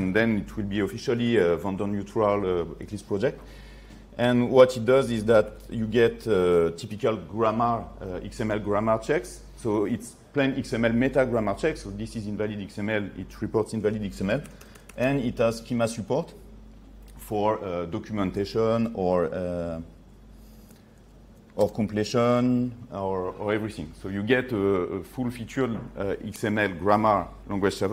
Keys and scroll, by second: 21.7 ctrl+space.